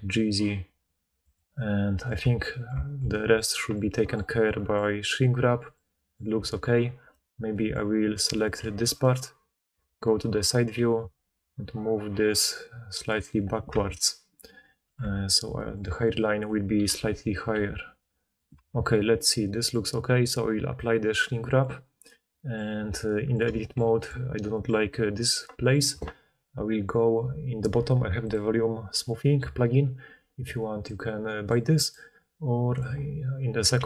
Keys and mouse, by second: 1.2 click, 1.6-4.7 middle drag, 2.2 Tab, 6.3 Tab, 7.0 1, 8.3 click, 8.6 g, 9.7 KP_3, 10.7 g, 13.7 Tab, 15.0 Tab, 16.9 KP_3, 17.5 g, 18.5 Tab, 20.7-24.7 drag, 22.7 Tab, 28.8-33.8 drag, 33.7 f.